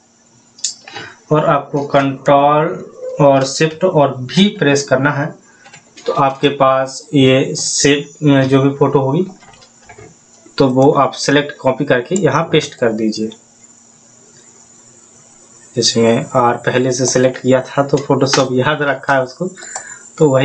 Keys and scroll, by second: 4.6 ctrl+shift+v, 9.1 ctrl+t.